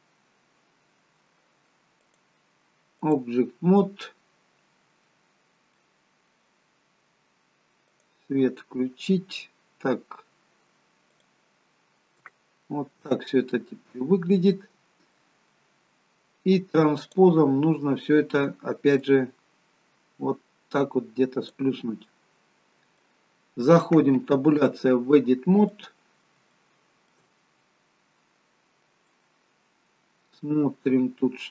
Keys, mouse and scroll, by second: 2.1 click, 4.2-5.1 scroll down 1, 5.3-5.8 scroll down 1, 5.8 middle click, 7.9 click, 11.2 click, 11.9 scroll up 2, 12.3 shift+middle click, 13.2 middle click, 15.3 middle click, 17.0 click, 19.1 click, 22.1 middle click, 24.5 Tab, 25.7 middle click, 26.6 shift+middle click, 27.6-28.7 scroll up 1, 29.0 middle click.